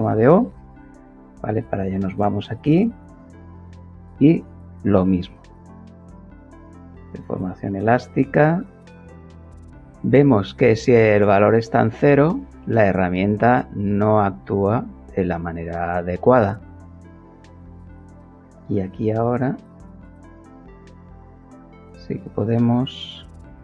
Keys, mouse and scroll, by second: 0.3 click, 1.5 click, 7.7-8.9 drag, 10.8 click, 12.9 click, 15.8-17.2 drag, 17.5 click, 19.2 click, 20.4 click, 23.5 click.